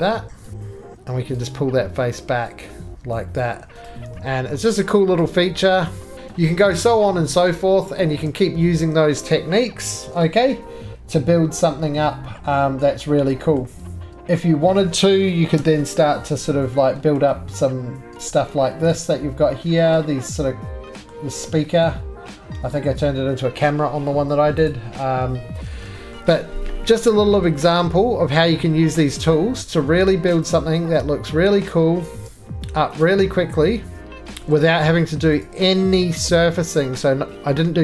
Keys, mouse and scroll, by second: 0.4 click, 0.5 right click, 0.5 3, 2.4 click, 3.3 middle click, 3.8 click, 3.8 4, 3.9 right click, 4.1 2, 4.7 click, 6.1-7.3 scroll, 6.1 x, 6.3 click, 7.3-8.2 scroll, 7.7 shift+middle click, 8.2 shift+middle click, 8.5-10.5 scroll, 10.5 shift+click, 13.4-15.4 scroll, 13.5 middle click, 14.0 shift+middle click, 14.3 middle click, 15.6 1, 15.9 scroll up 5, 16.5-18.3 scroll down 5, 17.1 shift+middle click, 18.3 click, 18.9 shift+middle click, 18.9 right click, 19.0-19.5 scroll, 19.5-21.1 scroll up 14, 19.9 middle click, 21.1 middle click, 21.4 middle click, 21.8 middle click, 22.1-23.6 scroll, 23.6 middle click, 24.7 click, 24.9 scroll down 6, 25.5-25.8 scroll down 9, 25.8 shift+middle click, 26.1 shift+middle click, 26.2 shift+middle click, 26.3-27.7 shift+scroll down 2, 27.7 scroll, 29.3 middle click, 29.4 scroll, 29.5 2, 29.5 shift+middle click, 30.5 click, 32.0 click, 32.1 ctrl+z, 33.0 click, 33.0 scroll down 2, 34.2 ctrl+z, 34.2-34.9 shift+scroll, 34.9 2, 35.4 click, 37.2 shift+middle click.